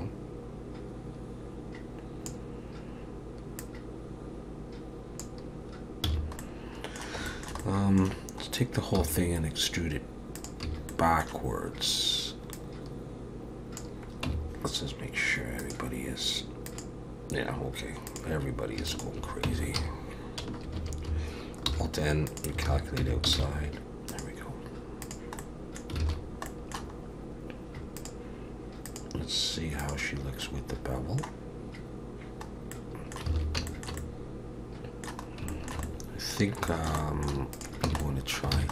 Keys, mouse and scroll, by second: 3.6 click, 6.1 a, 6.4 middle click, 7.3 shift+middle click, 7.6 middle click, 8.5-9.0 scroll up 1, 9.0 e, 10.7 a, 10.9 middle click, 12.5 click, 14.3 Tab, 15.6 click, 18.1 click, 18.9 shift+click, 19.5 Tab, 19.8 a, 21.7 alt+n, 22.7 alt+a, 23.0 Tab, 23.4 alt+a, 24.1 click, 25.4 middle click, 26.0 alt+a, 26.2 scroll down 2, 26.5 middle click, 27.0-27.4 scroll up 2, 28.0 click, 28.8 click, 30.4 middle click, 32.5 scroll up 2, 32.7 middle click, 33.3 alt+a, 33.7 shift+middle click, 34.0 middle click, 35.3 scroll up 1, 35.5 shift+middle click, 35.8 middle click, 36.7 shift+middle click, 37.0 middle click, 37.5 click, 37.9 Tab, 38.0 middle click, 38.5 alt+a.